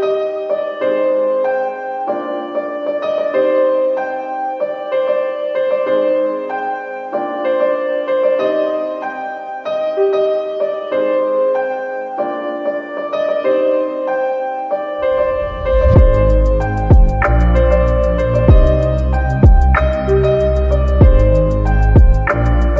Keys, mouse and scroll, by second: 1.1 click, 1.6 click, 1.9-5.0 drag, 8.8 click, 10.4 space, 10.7 click, 12.6 scroll down 1, 13.2 scroll up 1, 13.7 click, 15.9 click, 16.4 click, 16.8 click, 17.3 click, 17.5 click, 20.1 right click, 20.9 click.